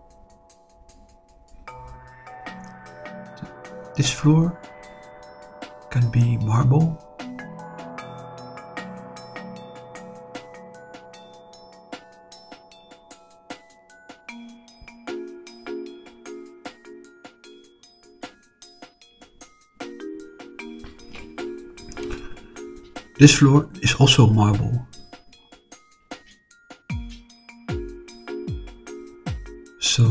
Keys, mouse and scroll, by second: 2.2 click, 3.5 shift+click, 4.0-7.1 middle drag, 7.8 shift+click, 9.0-10.2 middle drag, 11.0 shift+click, 12.5 shift+click, 13.1 shift+click, 15.1 click, 17.1 click, 17.5-19.2 middle drag, 19.5-20.9 middle drag, 21.6 click, 22.4 middle click, 23.6 shift+click, 24.4 middle click, 26.6 click, 27.5 middle click, 28.4 click, 28.9 middle click.